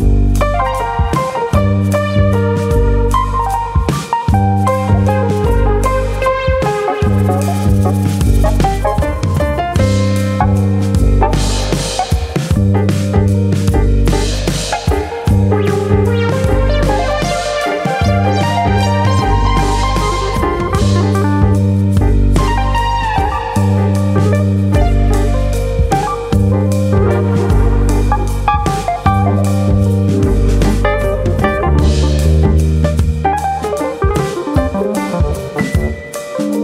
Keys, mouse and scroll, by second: 0.5 scroll up 2, 0.7 middle click, 1.2 click, 6.4 middle click, 6.4 click, 6.4 scroll down 1, 6.7 KP_1, 7.2 shift+middle click, 7.3 shift+middle click, 7.5 scroll up 3, 9.0 ctrl+Tab, 12.1 click, 13.0 click, 13.3 Tab, 13.7 scroll up 2, 13.9 shift+middle click, 14.8 click, 15.1 middle click, 15.9 ctrl+click, 16.1 middle click, 16.7 KP_1, 17.7 click, 22.0-23.2 scroll up 1, 23.2 ctrl+r, 25.5 right click, 25.9 s, 28.7 click, 29.2 alt+click, 30.0 g, 31.2 click, 31.6 s, 32.8 right click, 33.2 click, 34.2 shift+middle click, 35.6 shift+middle click, 36.1 click.